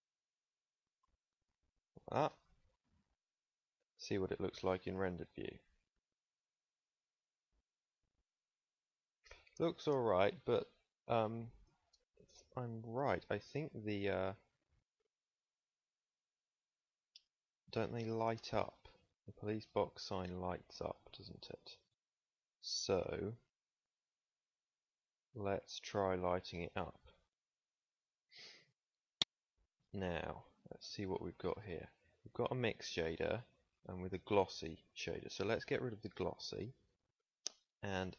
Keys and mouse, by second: 2.2 Tab, 2.7 middle click, 3.0 middle click, 3.7 ctrl+s, 12.0 ctrl+s, 17.3 Tab, 22.7 z, 24.1 click, 25.8 z, 30.8 ctrl+s.